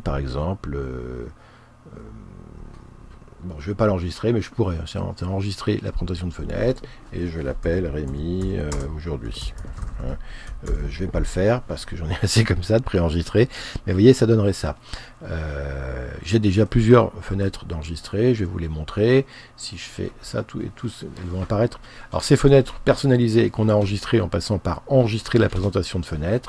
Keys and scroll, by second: 7.7-11.4 typing.